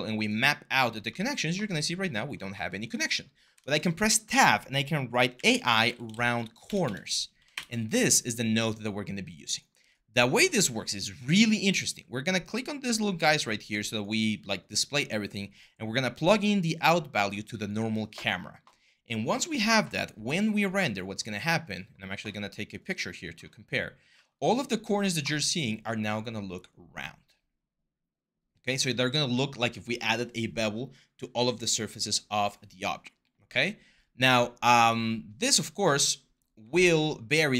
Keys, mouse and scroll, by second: 3.3 Tab, 4.9-7.6 typing.